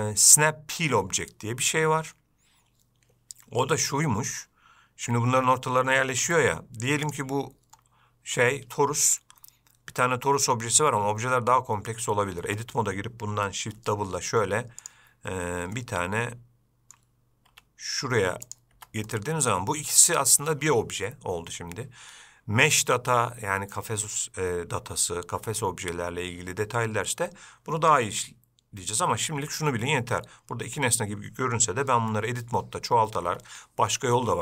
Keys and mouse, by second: 6.5 Tab, 12.7 Tab, 14.1 shift+d, 16.1-17.2 middle drag, 17.8 g, 19.0 Tab, 19.4-19.8 middle drag, 32.3 Tab.